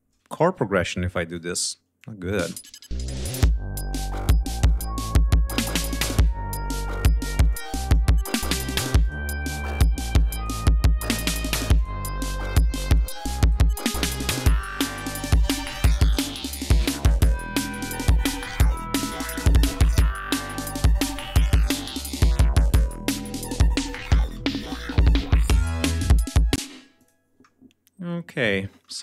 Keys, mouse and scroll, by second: 0.3 click, 1.2 shift+right click, 1.9 click, 2.4 space, 4.0 shift+click, 4.6 shift+right click, 5.4 shift+click, 6.1 shift+right click, 7.4 click, 7.9 click, 9.0 click, 9.9 click, 11.1 click, 11.7 click, 12.3 click, 12.8 click, 14.3 shift+right click, 15.6-17.1 drag, 17.6 click, 19.6 shift+click, 20.3 ctrl+scroll down 2, 20.9 ctrl+scroll up 2, 22.1 g, 22.7 ctrl+scroll up 2, 23.3 ctrl+scroll down 2, 24.3 d, 26.5 space, 26.9-28.4 drag.